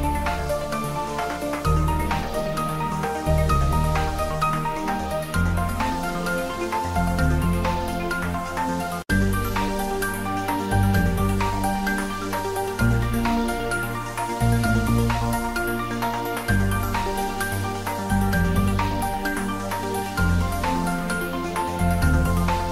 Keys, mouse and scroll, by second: 0.8 Return, 1.2 ctrl+s, 1.9-3.9 middle drag, 3.9 click, 5.0 Tab, 5.4 click, 6.1 3, 6.7 click, 9.0 i, 11.7 click, 12.0 e, 14.4 click, 14.7-16.8 middle drag, 16.8 Tab, 17.1 ctrl+middle click, 17.6 Tab, 18.4 ctrl+r, 18.6 click, 20.1 Tab, 20.9 ctrl+r, 21.5 click.